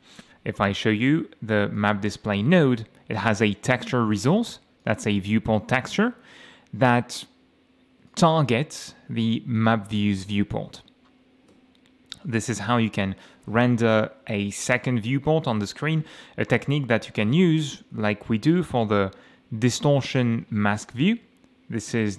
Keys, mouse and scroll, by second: 1.8 click, 4.4 click, 4.8 click, 8.1 click, 9.6 click, 11.5 Escape, 19.8 click, 20.6 scroll down 1.